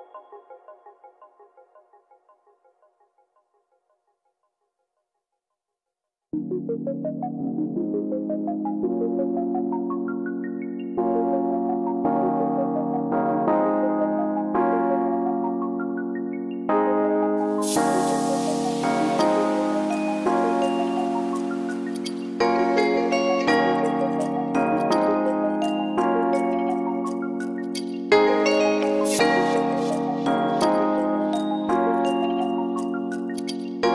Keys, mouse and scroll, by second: 3.9 click, 6.1 click, 7.1 click, 9.2-10.1 scroll up 1, 12.2-12.7 scroll up 10, 12.9 middle click, 15.0-15.3 scroll up 3, 15.3 click, 15.7 click, 16.8 click, 17.7 x, 18.5 scroll down 2, 18.7 scroll up 2, 19.1 click, 19.4-20.0 scroll down 1, 20.0 scroll down 1, 20.1 s, 22.1 KP_7, 22.9 click, 24.7 click, 25.9-26.3 scroll up 2, 27.8 shift+d, 29.5 s, 31.4 r, 33.0 click.